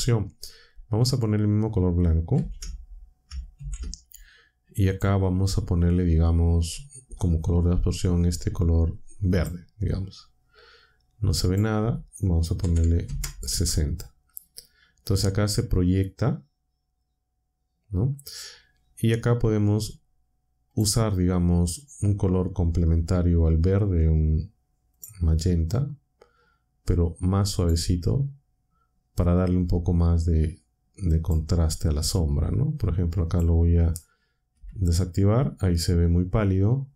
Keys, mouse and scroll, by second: 2.3 ctrl+c, 3.5 ctrl+v, 4.9 click, 9.3 click, 11.4 click, 12.3-13.5 typing, 20.7 click, 24.9 click, 27.5 click, 31.1 click, 33.2 click, 34.5 m.